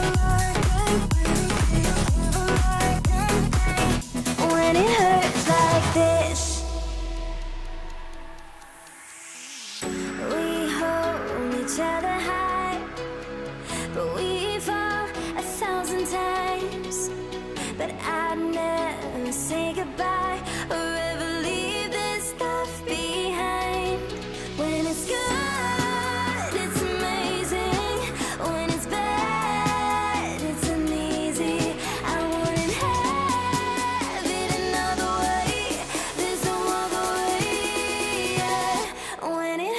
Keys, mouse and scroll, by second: 1.9 click, 5.4 Delete, 6.7 alt+scroll down 1, 7.6-7.9 alt+scroll up 1, 7.9 F7, 8.2 click, 9.9 alt+scroll up 1, 11.1-11.6 alt+scroll down 1, 12.7-14.2 drag, 14.6 alt+scroll down 1, 15.9-16.3 alt+scroll up 1, 16.8 click, 17.4 F7, 18.1 alt+scroll down 1, 18.3 alt+scroll up 1, 19.3 alt+scroll down 1, 19.8 alt+scroll up 1, 21.1 click, 24.8 F7, 25.5-27.2 drag, 28.7 alt+scroll down 1, 30.9-33.4 drag, 35.6 click, 36.0 ctrl+shift+], 38.6-39.7 drag.